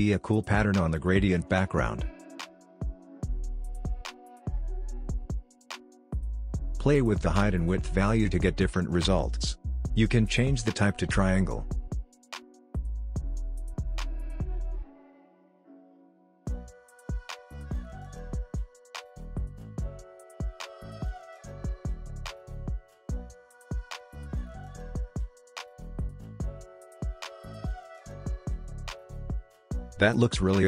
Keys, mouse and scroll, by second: 4.0-11.1 drag, 15.7-17.5 drag, 20.7 Left, 24.7 click, 27.2-27.7 drag, 27.7 typing, 29.3-30.6 scroll up 1.